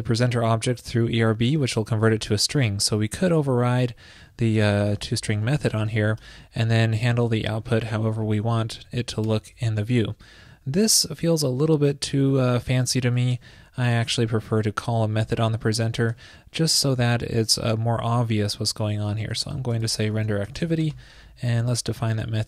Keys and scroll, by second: 0.7 super+s, 8.9 shift+super+Right, 13.3 alt+super+Left, 21.6 super+s.